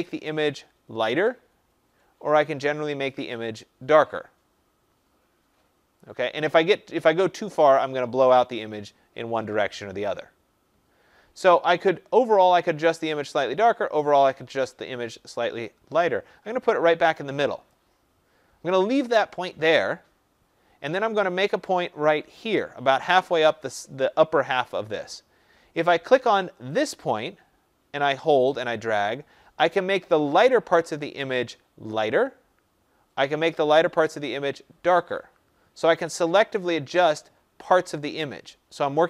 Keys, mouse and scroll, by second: 17.6-22.7 drag.